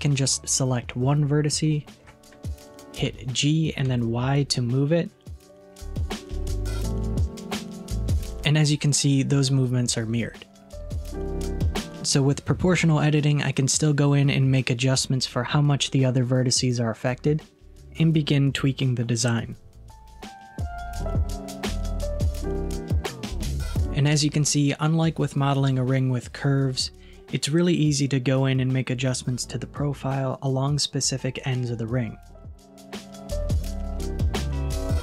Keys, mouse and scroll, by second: 0.6-3.1 middle drag, 3.1 g, 15.7-17.2 middle drag, 17.2-17.6 scroll down 1, 17.6-20.7 middle drag, 21.5 g, 22.4 KP_3, 23.1 g, 26.5 click, 27.1 g, 29.9 scroll down 1, 30.0-31.1 middle drag, 31.2 middle click, 32.1 KP_1, 32.4-32.9 scroll up 2, 34.7 alt+z, 34.8-35.0 middle drag.